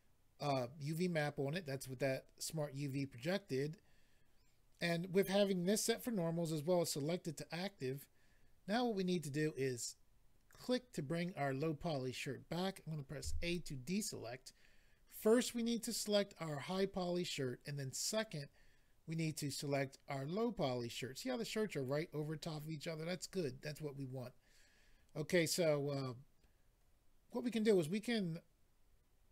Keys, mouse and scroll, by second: 10.5 click.